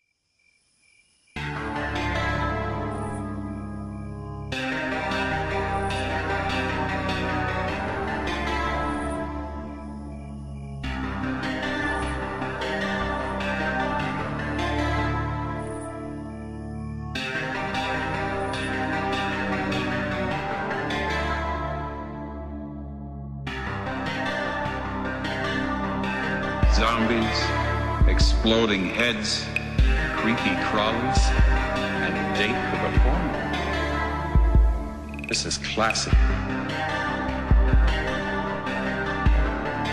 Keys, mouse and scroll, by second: 0.0-2.2 typing, 1.6 click, 3.3 click, 19.7 right click, 20.8 click, 24.2 shift+Num_Lock, 24.2 click, 24.4 shift+-, 25.1 BackSpace, 25.3 space, 26.4 Return, 28.3 click, 30.2 right click, 32.0 scroll down 1, 32.2 right click, 36.6 right click.